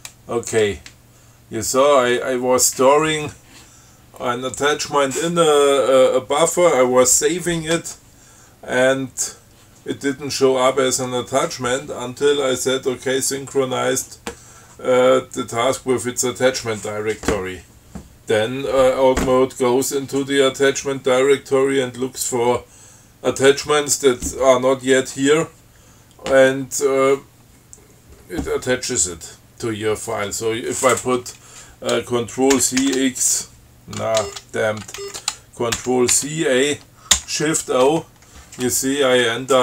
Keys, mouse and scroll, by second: 8.7 scroll down 2, 32.8 ctrl+c, 33.1 ctrl+x, 34.5 ctrl+g, 35.2 ctrl+g, 36.0 ctrl+c, 36.4 ctrl+a, 37.4 shift+o.